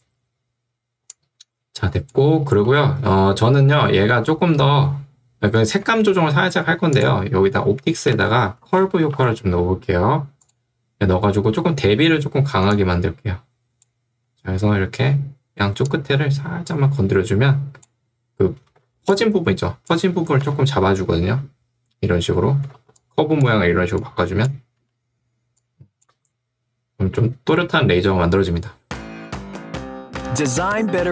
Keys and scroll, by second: 4.1 ctrl+2, 5.9 Escape, 8.1 ctrl+space, 8.5-9.6 typing, 19.0 ctrl+2, 20.6 2, 22.8 ctrl+2, 24.8 Escape, 26.2 space.